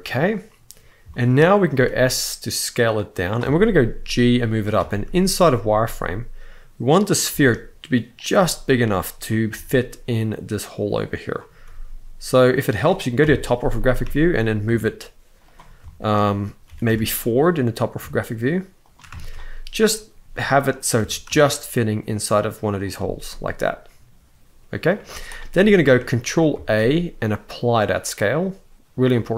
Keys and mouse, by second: 0.8 shift+middle drag, 1.5 s, 3.2 shift+middle drag, 3.8 g, 4.4 click, 4.6 shift+middle drag, 5.4 s, 7.0 g, 7.9 click, 8.1 s, 9.0 click, 9.2 g, 11.4 s, 12.3 click, 12.9 KP_7, 13.8 shift+middle drag, 14.4 g, 15.5 shift+middle click, 16.4 g, 16.6 y, 18.8 shift+middle drag, 19.9 s, 20.3 click, 20.7 g, 23.0-24.6 middle drag, 24.8 z, 26.2 ctrl+a, 28.7-29.3 middle drag.